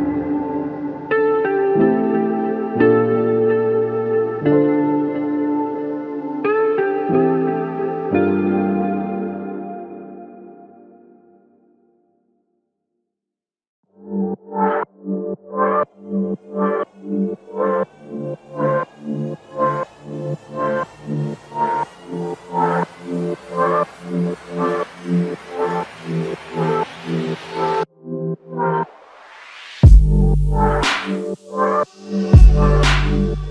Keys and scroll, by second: 6.4-7.1 typing, 16.4 scroll up 1, 16.9 typing, 28.5 typing.